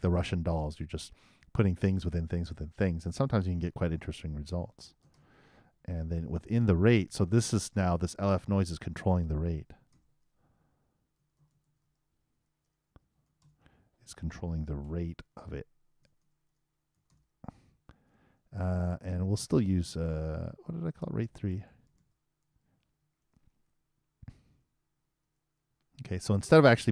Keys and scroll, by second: 5.3-6.5 typing, 9.9-11.8 typing, 14.1 shift+r, 14.8 shift+9, 16.0 shift+BackSpace, 17.3-18.2 typing, 22.8 shift+3, 24.6 shift+space, 24.9 shift+0, 25.7 shift+;.